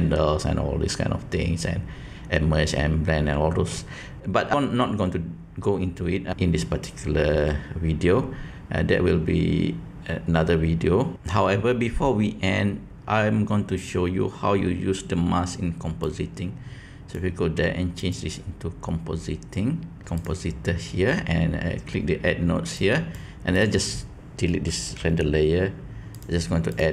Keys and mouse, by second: 16.1-17.1 drag, 18.1-20.2 drag, 22.7-23.1 drag, 23.5 click, 26.2-26.9 drag.